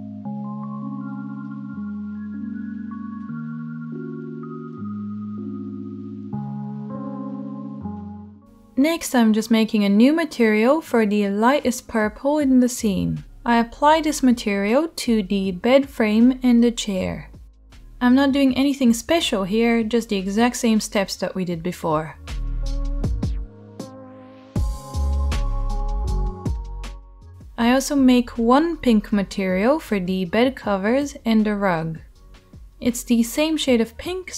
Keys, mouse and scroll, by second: 2.3 /, 10.8-11.5 drag, 10.8-11.5 middle drag, 12.2-14.8 shift+middle drag, 14.8-19.8 right drag, 19.8-21.1 middle drag, 21.1 right click, 21.4-31.5 drag, 21.4 middle click, 22.4-23.4 middle drag, 22.4-23.4 right drag, 24.1 middle click, 24.1 right click, 25.4-27.4 middle drag, 25.4-27.4 right drag, 27.5 middle click, 27.5 right click, 28.9 shift+middle click, 28.9 shift+right click, 31.5 middle drag, 31.7-34.2 drag, 34.2-34.3 middle drag.